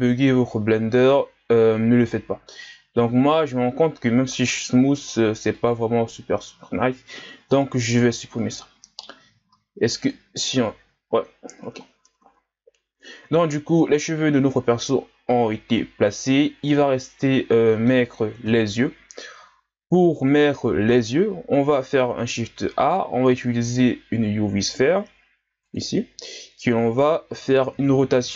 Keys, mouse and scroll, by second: 0.2-1.0 scroll up 1, 1.8-4.1 scroll up 4, 5.0 w, 8.0-9.5 drag, 9.5 w, 11.2-12.0 scroll down 1, 12.2 scroll down 3, 12.3 a, 13.0-13.9 scroll down 4, 13.9-15.2 scroll up 4, 15.2-15.8 scroll down 2, 15.9-16.7 scroll down 1, 16.7-18.5 middle drag, 18.5 KP_1, 19.5-20.0 scroll down 2, 20.0-20.5 scroll up 1, 20.6-21.7 scroll up 4, 21.7-22.5 scroll down 1, 22.5 shift+a, 27.4 Tab.